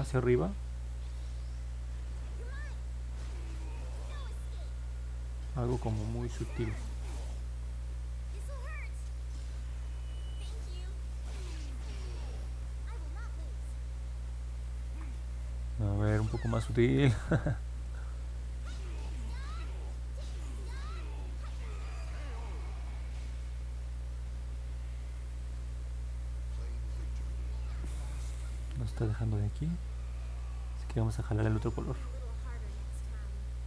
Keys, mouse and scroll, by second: 0.1 click, 0.7 click, 1.7 click, 2.4 click, 3.4 click, 3.8 click, 4.2 click, 4.6 click, 5.1 click, 5.5 click, 9.0 click, 9.7 click, 10.2 click, 10.7 click, 11.2 click, 11.5 click, 11.8 click, 12.2 click, 20.9 click, 21.3 click, 21.7 click, 22.1 click, 22.6 click, 23.0 click, 23.4 click, 23.7 click, 24.0 click, 24.3 click, 24.6 click, 29.4 click, 29.8 click, 30.2 click, 30.7 click, 31.2 click, 31.7 click, 32.2 click, 32.8 click, 33.2 click.